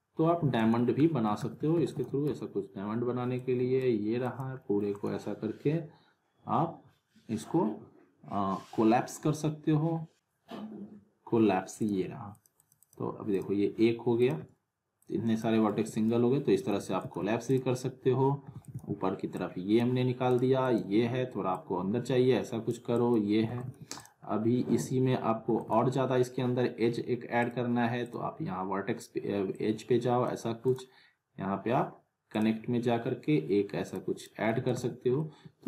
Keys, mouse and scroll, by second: 0.4 alt+w, 0.6 alt+right click, 1.0 alt+middle click, 1.8 alt+w, 1.9 alt+right click, 3.3-4.0 click, 4.6 middle click, 4.9 right click, 10.1-15.6 drag, 15.7 z, 16.8 alt+w, 17.0 alt+right click, 17.5 click, 18.5 alt+w, 18.6 alt+right click, 18.7 alt+w, 19.4-19.9 drag, 23.5 alt+w, 23.6 alt+right click, 23.6 alt+w, 24.0 click, 24.2-24.6 scroll up 1, 25.4 alt+w, 25.6 alt+right click, 25.7 alt+w, 27.4 click, 30.6 right click, 32.3 click, 34.5 alt+w, 34.6 alt+right click, 34.7 alt+w, 35.2-35.6 alt+middle drag.